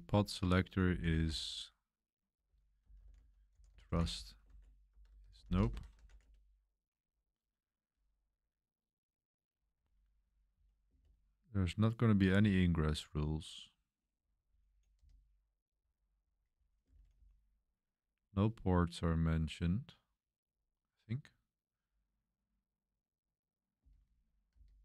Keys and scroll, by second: 0.0-6.8 typing, 9.3-17.6 typing, 19.2 typing, 23.8-24.8 typing.